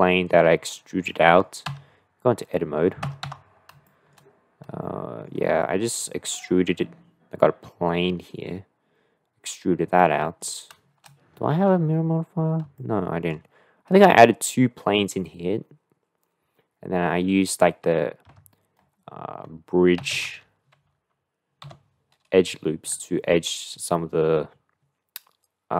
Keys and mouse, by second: 1.1 middle click, 3.3 Tab, 3.8 shift+middle click, 4.9 shift+middle click, 10.0 middle click, 12.8 shift+middle click, 18.4 F3.